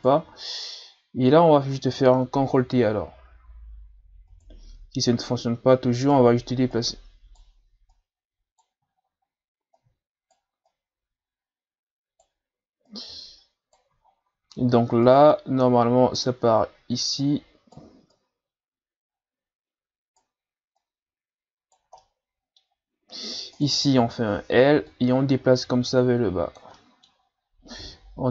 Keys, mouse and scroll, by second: 2.7 ctrl+t, 5.3 Right, 5.3 right click, 6.7 Right, 6.7 right click, 7.9 Right, 7.9 right click, 8.9-9.8 shift+scroll up 5, 9.8 right click, 10.7 right click, 12.9 right click, 14.0-15.0 shift+scroll down 5, 15.0 right click, 17.2 right click, 18.2 right click, 20.8 right click, 22.0 middle click, 22.7-23.2 scroll down 1, 23.2-23.6 scroll down 1, 23.6 right click, 24.0 l, 24.9-26.8 drag, 26.8 middle click, 27.2-28.3 scroll up 3.